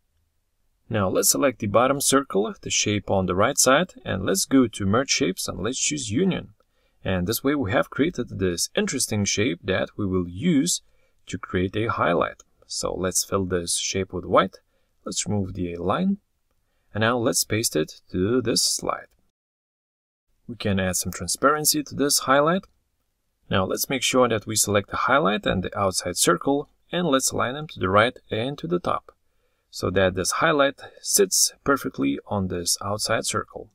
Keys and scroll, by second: 15.3 ctrl+c, 18.2 ctrl+v.